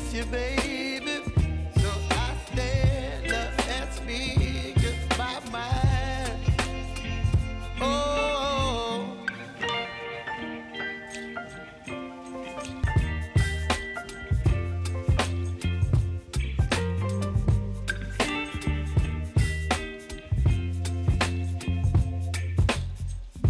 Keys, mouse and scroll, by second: 1.0-3.8 drag, 5.0 scroll up 1, 6.4 u, 8.7 click, 11.1 shift+click, 13.0 p, 13.7 click, 13.9 right click, 14.9 click, 15.8 right click, 16.7 click, 17.6 click, 17.7 right click, 18.5 click, 18.9 scroll down 1, 19.9 click, 20.3 right click, 21.5 click, 22.7 right click.